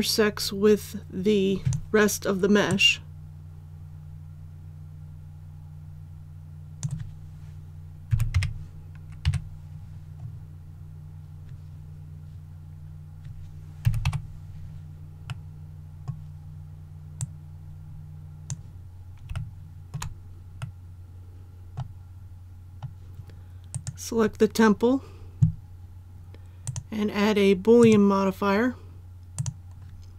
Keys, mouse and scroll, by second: 8.1 z, 8.3 KP_4, 9.2 KP_3, 10.1-13.6 scroll up 1, 13.8 z, 14.0 KP_6, 15.2-16.9 middle drag, 17.1-18.9 drag, 19.3 shift+middle click, 20.6-21.9 middle drag, 22.1-22.6 scroll down 1, 23.7 right click, 26.6 click.